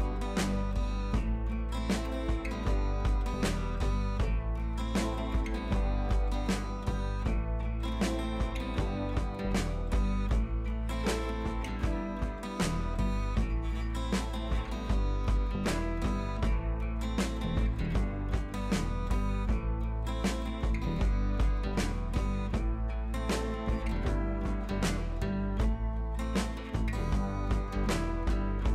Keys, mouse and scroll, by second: 2.5 Right, 7.2 Right, 7.6-12.0 alt+drag, 12.4 Left, 13.5 click, 13.6 Left, 14.0 click, 15.1 ctrl+z, 15.5-17.8 drag, 17.7 Left, 18.7 click, 19.2 ctrl+t, 19.6 Left, 21.3 Up, 22.0 Left, 23.3 Up, 23.8 Left, 27.3 Up, 28.6 scroll down 1.